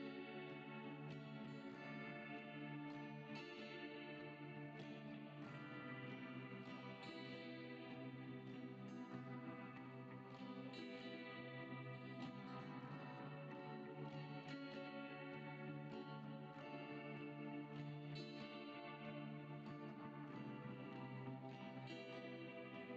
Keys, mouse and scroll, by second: 0.1-1.8 drag, 2.1-2.6 scroll down 7, 3.5 click, 5.5-6.2 scroll down 1, 6.2-7.9 drag, 10.9 click, 12.0 click, 12.3 KP_1, 13.7 ctrl+KP_1, 14.5-15.2 scroll up 4, 15.2 shift+a, 18.0 Delete, 18.9 shift+a.